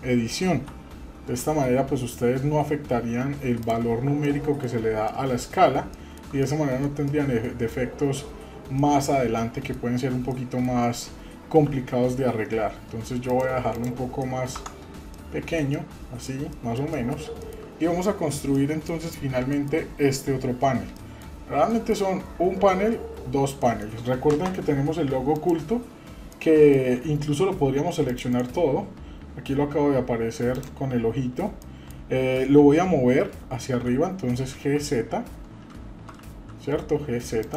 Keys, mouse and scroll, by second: 0.7 s, 3.9 scroll down 2, 4.2 middle click, 4.6 scroll down 1, 5.0 middle click, 5.4-5.8 scroll down 1, 5.9 shift+middle click, 6.4 middle click, 7.1 middle click, 8.0-8.7 scroll up 2, 8.7-9.7 middle drag, 10.0 scroll up 1, 10.3 middle click, 11.7 s, 13.7 click, 14.2 middle click, 14.6 Tab, 14.9 scroll down 2, 15.1-15.6 middle drag, 15.7-16.3 middle drag, 16.5 middle drag, 16.9 middle click, 17.4 shift+middle click, 18.5 middle click, 19.1 scroll up 1, 19.5 shift+middle click, 21.0 middle click, 21.2-21.6 scroll down 1, 21.7 shift+middle click, 23.6 middle click, 25.3 click, 26.3-26.7 middle drag, 28.1 click, 28.3-31.1 right drag, 31.6 middle drag, 33.7 g.